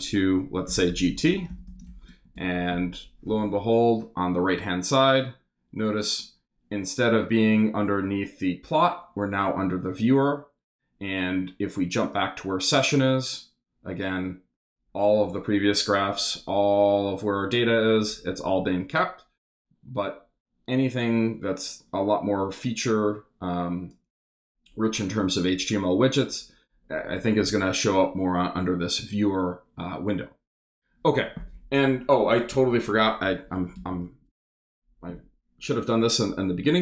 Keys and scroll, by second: 0.4-2.3 typing, 2.4 shift+super+Return, 2.9 super+Return, 33.8 Return.